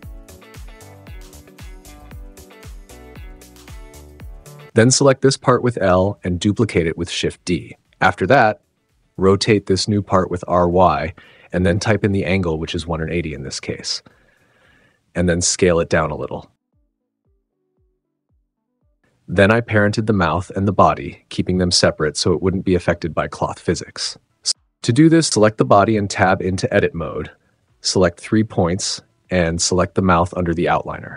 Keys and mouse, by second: 0.5-2.4 typing, 0.9 click, 1.1 click, 1.4 click, 1.9 click, 2.1 super+z, 4.8 l, 6.8 shift+d, 7.3 z, 8.0 click, 8.7-9.4 typing, 9.8 click, 10.0 super+z, 10.5 click, 11.1-12.7 typing, 11.9 click, 13.9 click, 14.0 s, 14.1 z, 14.9 click, 15.0 g, 15.1 z, 17.0 Tab, 17.4 s, 17.4 x, 18.6 s, 18.8 y, 19.7 click, 25.2 Tab, 27.7 right click, 28.3 right click, 30.5 shift+click.